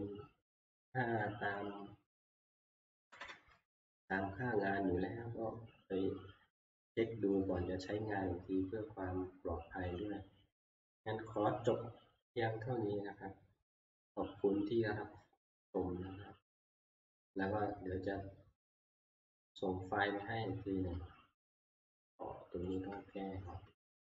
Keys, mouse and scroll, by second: 3.0 ctrl+Page_Down, 3.2 ctrl+Page_Down, 6.8 click, 9.2 click, 10.0 click, 18.8 click, 19.5 click, 22.8 click, 24.1 middle click.